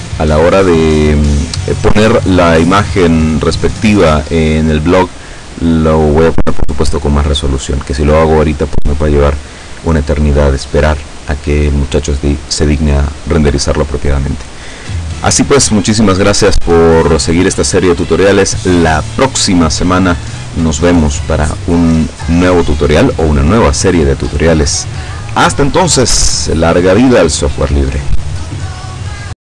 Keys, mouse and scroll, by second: 3.0 scroll down 1, 29.4 click.